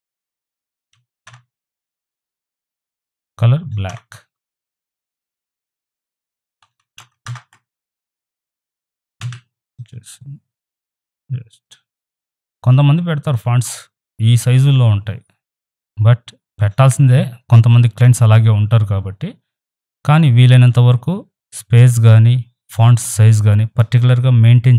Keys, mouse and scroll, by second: 1.3 Return, 5.6 click, 6.6 ctrl+shift+[, 9.2 v, 9.7-12.7 drag, 12.7 Left.